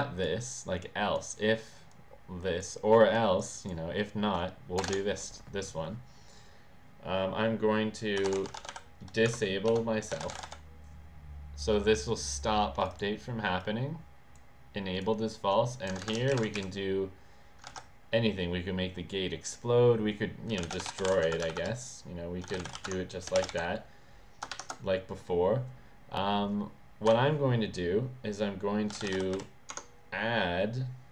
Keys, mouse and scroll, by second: 0.8 click, 1.9 click, 3.1 click, 3.6 click, 4.8 BackSpace, 4.8 Return, 7.9-10.8 typing, 9.2 Tab, 11.7 click, 12.8 click, 13.6 click, 14.9 click, 15.9 Return, 16.1 Return, 16.3 Return, 16.5 Up, 17.7 ctrl+s, 20.4-23.3 typing, 27.0 Delete, 28.6-29.6 typing, 29.7 Tab.